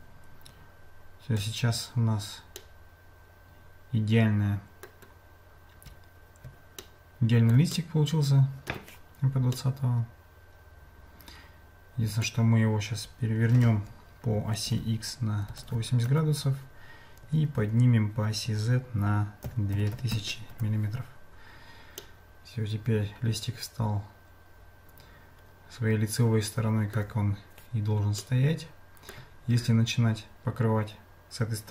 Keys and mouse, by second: 2.6-5.0 middle drag, 6.8 shift+middle click, 7.7-8.7 middle drag, 9.6-12.3 middle drag, 22.0-27.0 middle drag, 28.2-29.2 shift+middle drag.